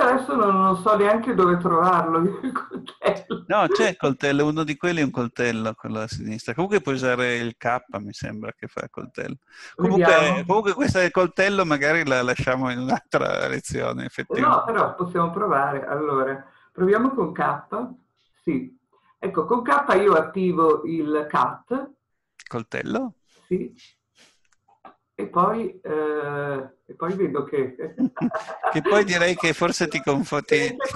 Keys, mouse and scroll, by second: 17.8 k.